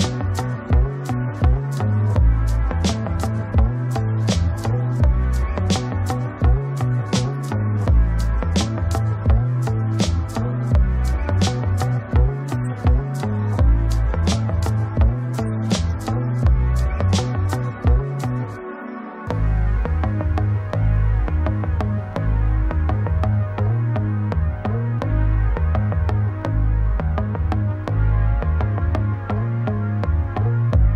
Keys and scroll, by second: 5.6 ctrl+space.